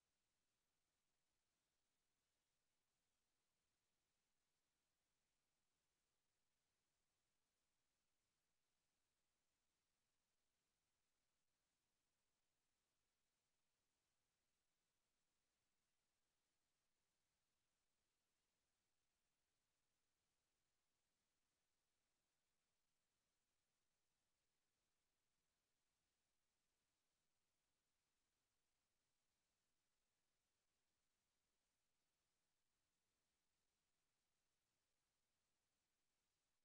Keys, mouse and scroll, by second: 3.8 g, 5.6-6.0 drag, 6.0 g, 6.7 click, 8.1 Home, 10.4-12.5 middle drag, 14.2-15.8 drag, 25.4-26.9 drag.